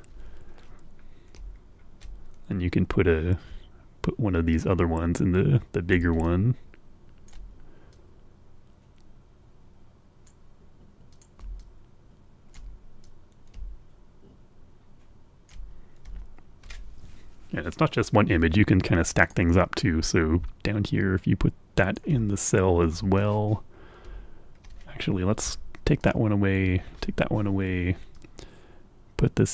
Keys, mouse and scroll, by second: 0.1-0.5 scroll up 1, 1.0-2.0 scroll down 2, 4.6-6.1 drag, 6.2-7.4 ctrl+drag, 7.9-10.4 drag, 11.1 click, 11.5-12.7 ctrl+drag, 13.0-15.6 drag, 16.1-16.6 ctrl+scroll up 1, 18.1-18.5 scroll up 2, 19.2 click, 19.7-22.1 drag, 22.3-22.9 ctrl+scroll down 3, 23.3-24.0 scroll down 3, 24.1-24.6 ctrl+scroll up 2, 25.0 Delete, 25.9 click, 26.6 Delete, 26.9-27.3 scroll up 2, 28.1-29.5 drag.